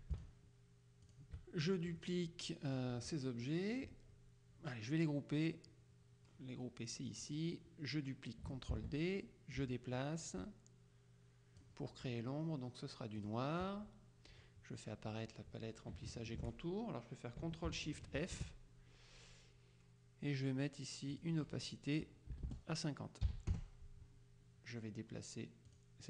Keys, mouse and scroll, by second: 0.2 shift+click, 1.2 click, 2.1-3.4 middle drag, 7.2 click, 8.8 ctrl+d, 9.6-12.2 shift+drag, 13.3 click, 18.3 ctrl+shift+f, 21.2 click, 22.4 BackSpace, 23.4 KP_5, 23.6 KP_Enter, 25.8 click.